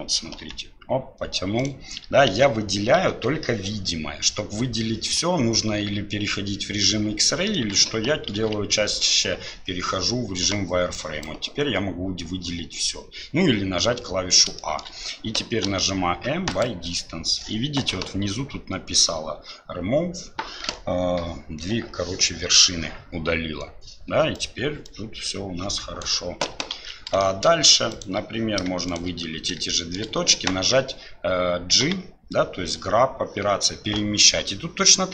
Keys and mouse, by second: 2.3 ctrl+z, 3.1 KP_7, 8.3 shift+z, 10.9 click, 14.6 shift+click, 15.6 m, 24.3 right click, 24.8-26.0 drag, 26.8 ctrl+z, 27.2 shift+middle click, 27.9 click, 28.9 shift+click, 29.7 shift+click.